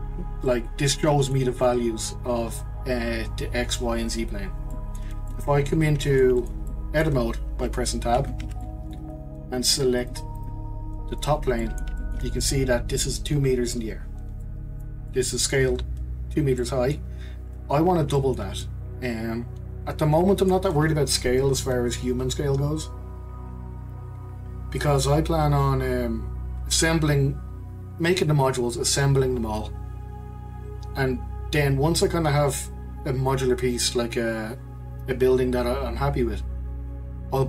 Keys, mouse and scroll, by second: 0.5-3.5 middle drag, 4.7-8.1 middle drag, 8.1 Tab, 8.6-10.0 middle drag, 10.0 click, 11.2 click, 11.6-17.8 middle drag, 17.8-18.1 scroll down 2, 18.1-21.6 shift+middle drag.